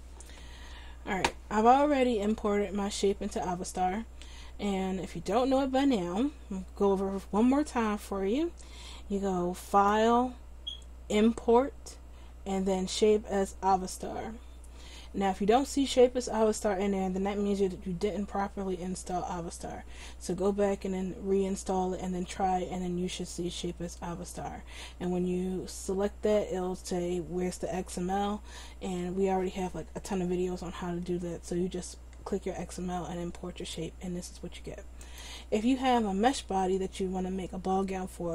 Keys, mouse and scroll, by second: 9.7-11.6 drag, 33.9 middle click.